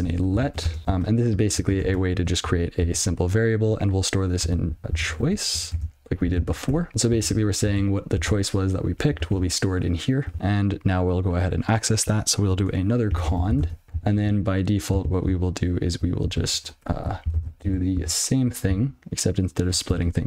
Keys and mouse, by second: 0.3 e, 0.6 space, 1.4 (, 2.4 ctrl+b, 4.2-6.2 typing, 6.3 ctrl+alt+space, 6.8 Tab, 7.4 ctrl+alt+f, 8.1 ctrl+f, 9.4 alt+j, 10.3 ctrl+b, 12.5-14.0 typing, 14.6 ctrl+p, 15.3 ctrl+f, 17.3 Tab, 18.2 ctrl+alt+space, 18.4 ctrl+y.